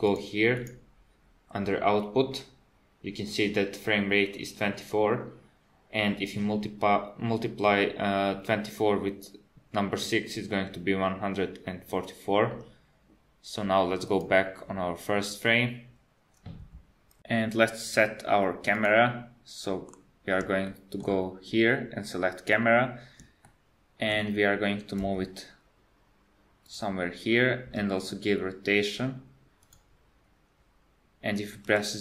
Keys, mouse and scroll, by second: 0.1 click, 0.6 click, 14.1 click, 18.8 click, 19.9 KP_7, 20.7 shift+middle click, 22.7 scroll down 2, 23.4 shift+middle click, 25.0 g, 27.7 r, 31.6 KP_0.